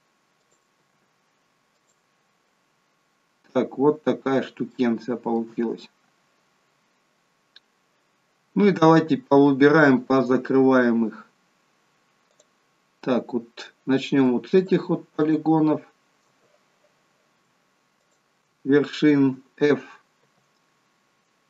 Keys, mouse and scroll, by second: 0.3 click, 0.8 g, 2.6 scroll down 1, 4.7 shift+middle click, 6.8-7.5 scroll down 2, 7.5 scroll up 2, 12.3 click, 14.6 shift+click, 15.2 click, 20.2 f.